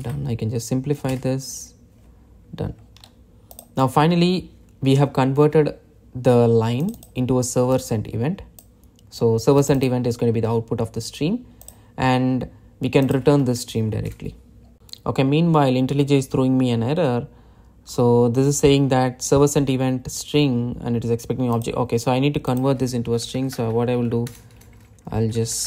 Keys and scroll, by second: 0.6 alt+Return.